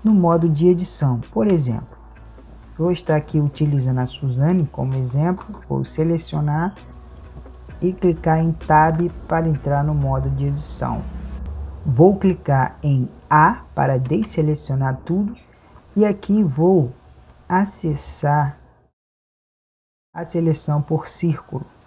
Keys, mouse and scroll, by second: 2.2 a, 3.7 middle click, 5.5-9.1 right drag, 9.4 Tab, 14.1 a, 20.1 click.